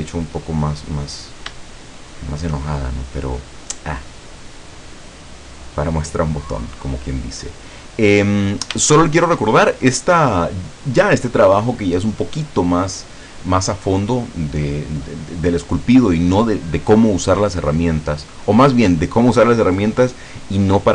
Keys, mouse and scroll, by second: 1.8 shift+click, 2.5 shift+middle click, 2.8-4.4 shift+scroll up 1, 4.4-5.4 drag, 5.5-8.1 drag, 8.3-8.7 scroll down 1, 9.0-10.2 shift+middle drag, 10.3-10.7 scroll up 1, 10.7 scroll down 1.